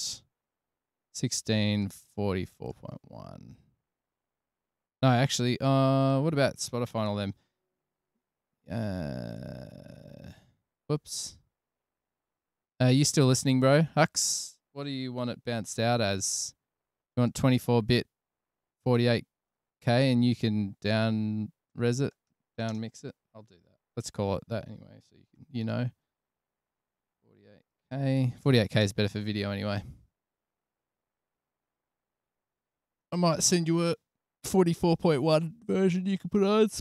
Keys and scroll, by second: 7.9 alt+super+v, 11.1 super+z, 16.0 alt+super+b, 23.0-26.2 typing, 27.4-28.4 typing, 29.2 Return.